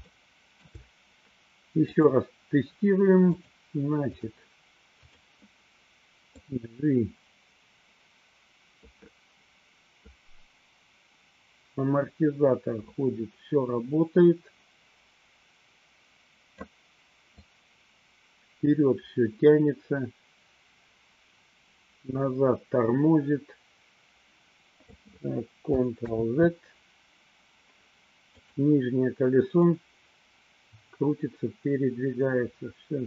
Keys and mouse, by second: 0.1 shift+middle click, 1.9 click, 3.4-4.3 drag, 5.2 click, 6.6-16.9 drag, 17.5-25.1 drag, 26.4 ctrl+z, 28.2 click, 29.8-33.0 drag.